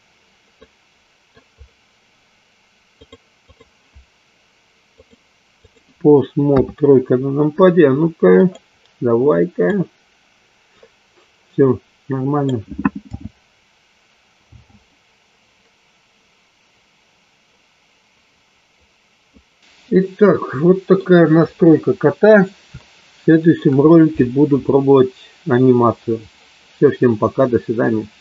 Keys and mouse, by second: 0.6 middle click, 4.9 click, 6.5 KP_3, 8.3 drag, 10.5-12.5 drag, 12.9 f, 14.6 g, 19.6 ctrl+z, 19.8-20.8 middle drag, 23.0-23.5 shift+middle drag.